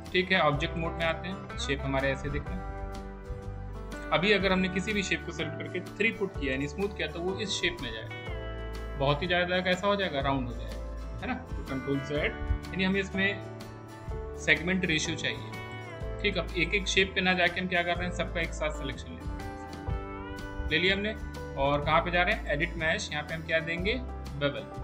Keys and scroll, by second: 6.0 3, 14.5 ctrl+1.